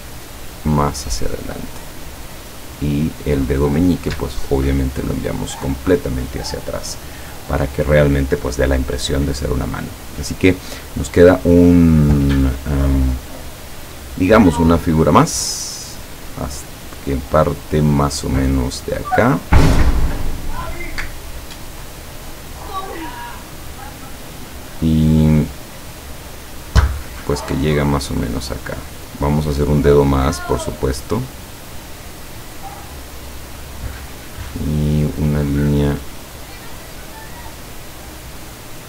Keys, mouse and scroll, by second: 0.5 click, 3.0 click, 4.9 click, 11.3 click, 19.8 click, 28.8 click, 31.1 click, 32.6 click, 33.6 click, 38.6 click.